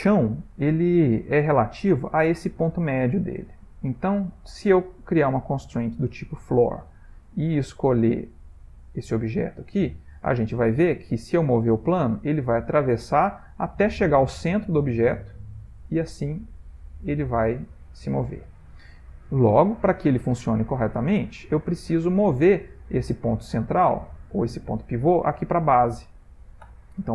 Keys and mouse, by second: 1.1 middle click, 5.2 click, 7.9 click, 9.8 middle click, 11.0 click, 11.5 g, 20.7 middle click, 22.0 click, 26.7 Tab.